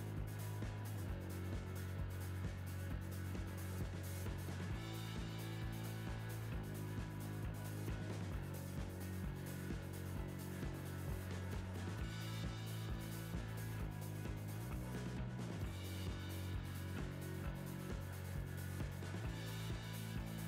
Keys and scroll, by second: 12.8 Right, 19.5 Right.